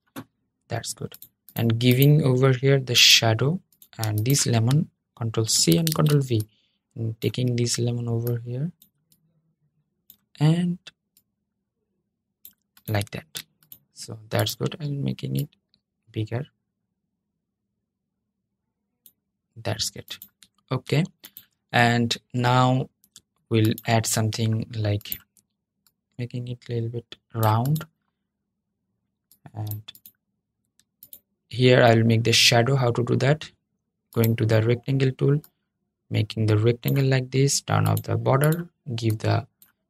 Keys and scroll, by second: 5.2 super+c, 5.6 super+v.